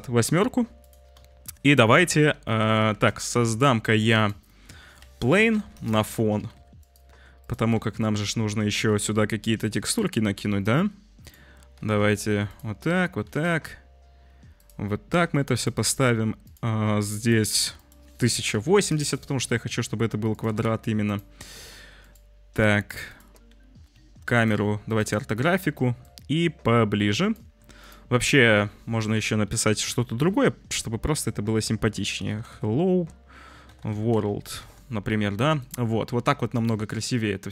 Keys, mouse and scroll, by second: 0.8 click, 1.2 shift+a, 2.3 `, 2.9 shift+a, 4.5 click, 4.8 r, 6.3 g, 7.0 s, 7.7 `, 8.7 shift+a, 11.7 g, 12.6 `, 13.2 g, 15.5 click, 17.8-18.9 drag, 20.4 g, 22.0 click, 24.3-24.9 drag, 26.0-27.3 shift+drag, 28.2 Tab, 28.6 ctrl+a, 29.6 h, 31.9-34.1 typing, 34.6 Tab, 36.6 click.